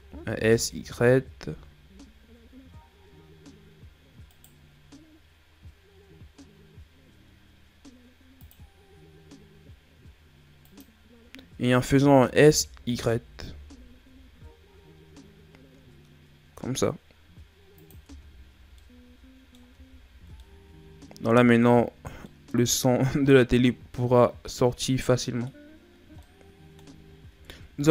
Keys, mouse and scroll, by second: 8.4 click, 12.2 s, 18.0 Tab, 18.5 scroll down 2, 18.8 middle click, 19.7 a, 20.0-20.4 scroll down 4, 20.4-21.7 middle drag, 21.7-22.2 scroll up 6, 22.2-25.3 middle drag, 25.8-26.2 scroll down 2, 26.2 middle click, 27.1-27.8 shift+scroll down 11, 27.8-27.9 middle drag.